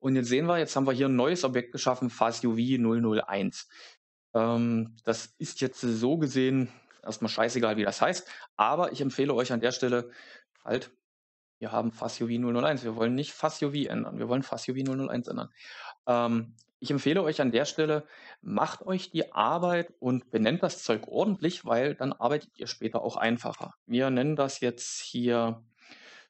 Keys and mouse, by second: 5.3 click, 6.8 F2, 14.7 F2, 18.8-26.2 drag, 21.2 shift+Left, 21.4 shift+Left.